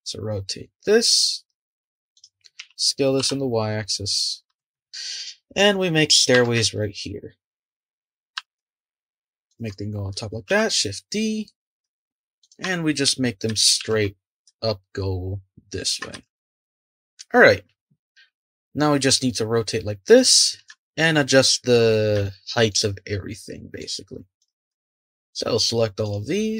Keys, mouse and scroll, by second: 2.1 click, 2.6 s, 4.5 g, 5.1 click, 6.3 g, 8.3 g, 10.5 shift+d, 13.8 shift+d, 16.2 shift+d, 19.3-20.3 middle drag, 20.3-20.7 scroll up 1, 20.7-21.9 middle drag, 21.9 scroll up 1, 22.2-24.4 shift+middle drag, 24.4 click, 25.1 shift+click, 25.6 shift+click, 26.0 shift+click.